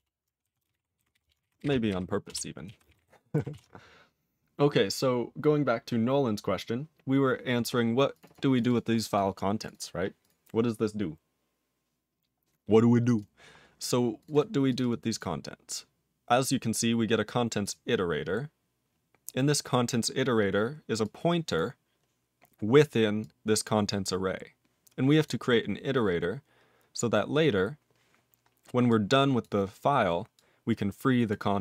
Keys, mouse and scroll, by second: 0.0 Return, 0.4 ctrl+a, 0.6 ctrl+space, 0.7 ctrl+g, 1.2 Return, 2.3 ctrl+Return, 2.6 ctrl+a, 2.8 ctrl+space, 2.9 ctrl+e, 2.9 ctrl+g, 3.5 ctrl+s, 8.2 click, 8.2 double click, 8.5 click, 8.7 double click, 8.9 click, 9.6 click, 9.7 double click, 10.2 click, 13.1 click, 13.5 scroll down 4, 14.2 click, 14.3 double click, 14.7 click, 14.8 double click, 15.1 click, 17.6 click, 19.2-21.0 scroll down 3, 21.0 click, 21.5 click, 22.0-22.8 scroll up 5, 23.2 click, 23.8 click, 25.2 click, 26.3-27.9 scroll down 13, 28.9 click, 29.4 click, 30.3 click, 31.3 click.